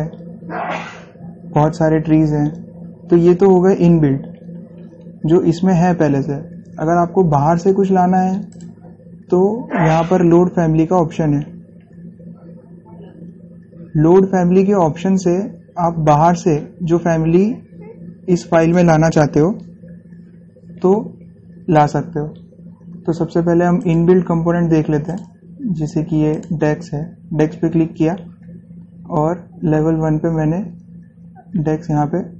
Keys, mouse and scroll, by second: 1.7 scroll down 1, 5.6 scroll, 6.8 scroll up 1, 6.9 scroll, 7.1-7.4 scroll up 1, 8.7 click, 18.8 click, 24.0 click, 26.6 click, 31.3-32.0 scroll up 1.